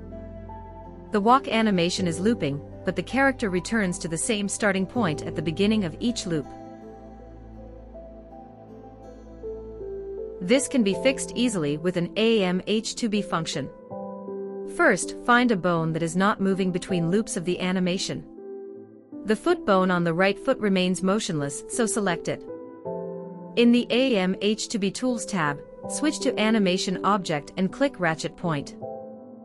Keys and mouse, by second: 0.0 click, 0.3 click, 0.5 click, 1.9 space, 5.4 space, 6.7-7.5 drag, 7.9 Right, 8.1 Right, 8.8 Right, 9.8 Left, 11.6-12.0 shift+drag, 13.0-13.3 shift+drag, 14.4 Left, 14.7 Left, 15.1 Left, 15.5 Left, 15.8 Left, 16.5 Right, 16.8 Right, 17.1 Right, 17.4 Right, 17.8 Right, 20.5 ctrl+Tab, 23.3 click, 26.1-27.4 drag.